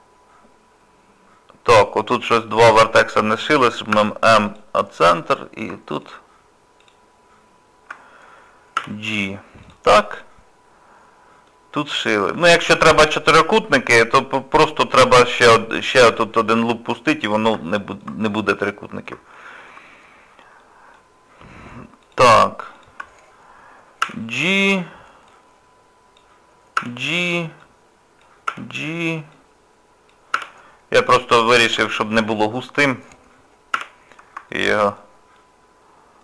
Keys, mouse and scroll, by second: 1.7 click, 3.9 m, 5.3 click, 6.0 shift+click, 8.8 j, 9.1 scroll down 2, 9.6 click, 10.0 middle click, 11.8 scroll down 1, 12.3 scroll down 1, 12.4 scroll up 2, 13.1 middle click, 13.7 scroll up 1, 17.7 shift+middle click, 18.2 scroll down 2, 18.6 middle click, 19.3 shift+middle click, 19.9-20.3 scroll up 3, 20.6 middle click, 21.2 scroll up 1, 22.0 click, 22.7 shift+click, 24.0 j, 25.3 click, 26.8 j, 27.6 click, 28.5 j, 29.3 click, 30.4 j, 31.3 click, 32.3 shift+click, 33.7 j, 34.0 scroll down 1, 34.5 shift+middle click, 35.0 middle click, 35.6-36.0 scroll up 3.